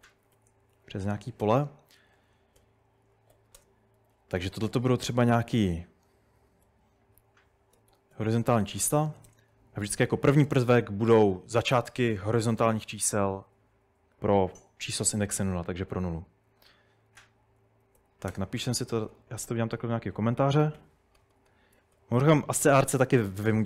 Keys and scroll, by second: 0.0-4.5 typing, 3.1 Escape, 6.0-11.0 typing, 17.2 Escape, 17.3-19.5 typing, 20.8-21.9 typing, 23.2-23.6 typing.